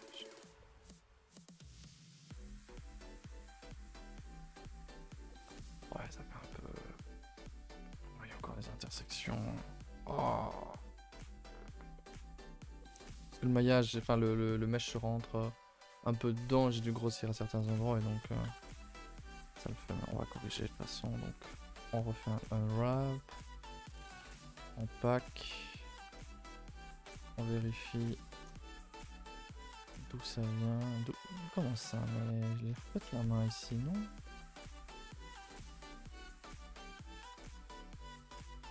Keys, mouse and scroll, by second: 0.4 right click, 0.6 middle click, 0.8 a, 0.9 a, 1.1 middle click, 1.3-1.7 scroll down 1, 1.7 middle click, 2.2 a, 3.6 u, 4.8 a, 5.0 a, 11.5-12.7 middle drag, 12.7 scroll down 2, 12.9 a, 13.1 a, 13.4-18.4 shift+middle drag, 18.4 alt+h, 18.7 scroll down 5, 18.8 a, 19.0 a, 19.1 middle click, 20.0 scroll up 2, 20.3 a, 20.8 a, 22.3 u, 23.6 n, 24.7 click, 25.9-26.2 drag, 26.2 n, 28.6 a, 28.8 a, 30.0 click, 32.4 scroll down 1, 32.7 a, 32.8 a, 33.0 4, 33.3-33.6 scroll up 4, 33.6 middle drag, 33.9-34.2 scroll up 1, 34.2 shift+middle click, 34.5 scroll up 2, 34.6-38.7 middle drag.